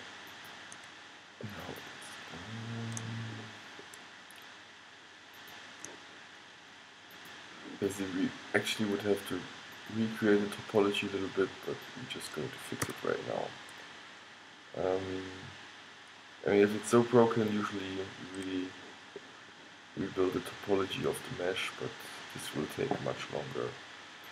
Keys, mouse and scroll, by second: 2.4-5.5 middle drag, 5.5-9.1 drag, 9.9-13.8 drag, 13.0 f, 13.8-15.3 middle drag, 16.9 middle click, 18.0-23.5 middle drag.